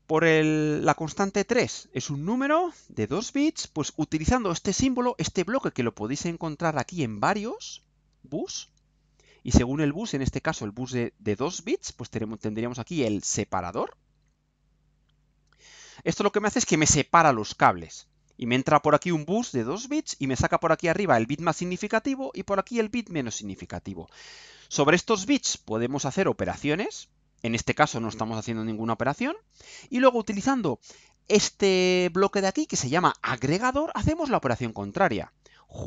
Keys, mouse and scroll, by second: 13.7 click, 15.5 click.